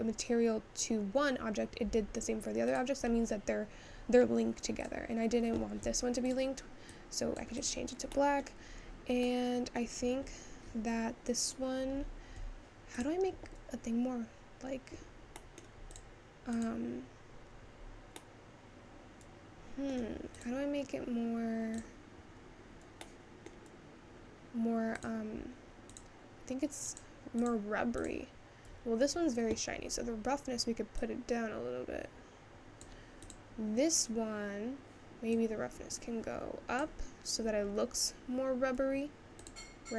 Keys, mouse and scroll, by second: 2.8 click, 3.8-4.9 scroll up 3, 4.9 click, 7.0 click, 7.6 click, 8.7 middle click, 8.9-9.5 scroll down 2, 9.5 middle click, 10.4 scroll up 3, 13.1 click, 15.5 middle click, 15.9 click, 17.0 click, 18.5-20.4 middle drag, 20.4 click, 22.1 click, 23.2-25.2 middle drag, 25.2 click, 26.4 click, 27.5 click, 28.1 click, 32.0-35.3 drag, 37.2-39.8 drag.